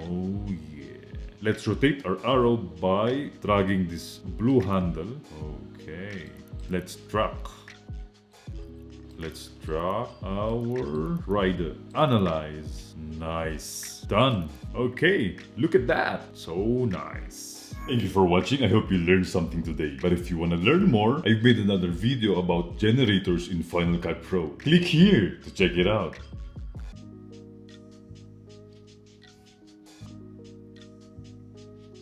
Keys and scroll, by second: 14.7 space.